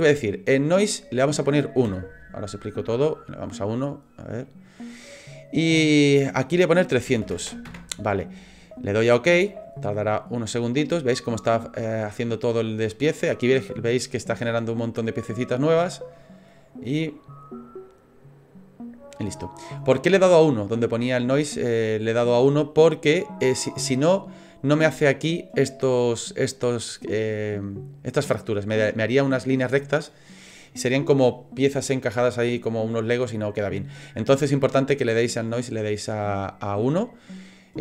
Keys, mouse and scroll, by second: 7.4 KP_0, 19.1 middle click, 20.3 middle click, 24.4 scroll up 4, 34.3 scroll down 2, 35.0 middle click, 35.0-36.3 scroll down 1, 36.3 middle click.